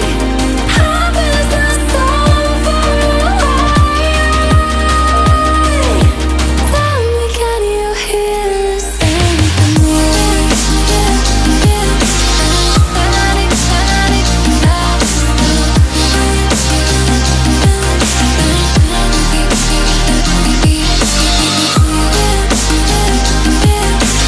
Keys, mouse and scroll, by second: 0.0 click, 0.1 click, 10.9-11.3 alt+scroll down 2, 11.3-12.0 alt+scroll up 2, 12.0 click, 12.7-13.1 alt+scroll down 2, 13.2-14.6 alt+scroll up 2, 14.7 click, 17.0 Delete, 18.0 click, 18.5 alt+scroll up 1, 19.3 click, 19.8 alt+scroll down 1, 22.2 click.